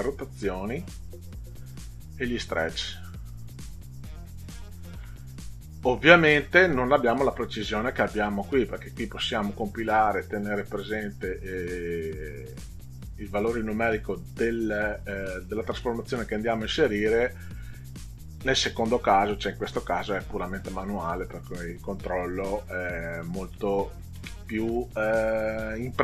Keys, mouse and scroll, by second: 2.2-3.7 drag, 8.5 click, 19.6 click, 23.7 middle click.